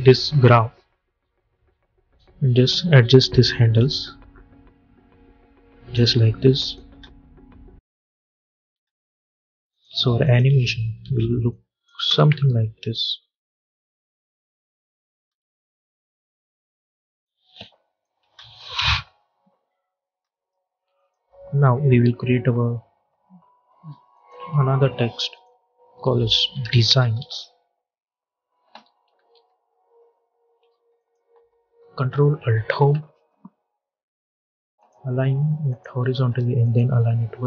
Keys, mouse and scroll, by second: 6.8 space, 8.7 space, 9.6 click, 10.4 space, 11.4 click, 11.9 space, 15.1 space, 15.5 click, 15.9-17.1 scroll down 1, 17.1 click, 18.1 space, 20.1 space, 20.8 click, 21.4 u, 24.0 click, 26.0-27.0 typing, 28.3-29.7 typing, 30.9 click, 32.6 ctrl+alt+Home, 34.7 click.